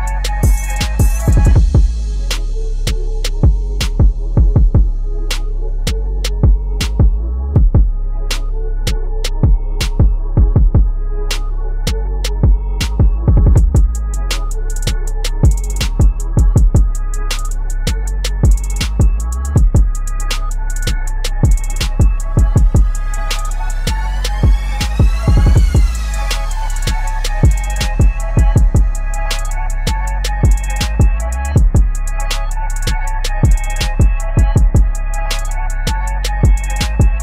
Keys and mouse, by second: 0.3-4.7 drag, 10.3 click, 13.6 t, 14.3 click, 14.9-18.8 typing, 20.1 click, 22.8-23.5 typing, 24.1 click, 25.0 ctrl+d, 26.1 click, 27.6 ctrl+a, 30.3 click, 31.7 ctrl+a, 33.4 click.